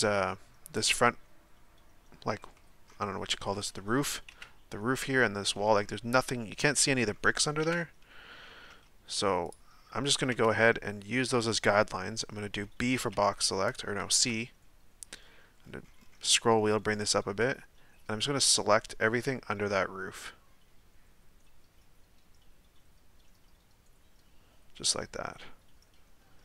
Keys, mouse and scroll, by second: 2.5-4.3 middle drag, 4.3 KP_1, 5.5-7.6 middle drag, 7.6 KP_1, 9.5 z, 10.0 scroll up 1, 13.6 b.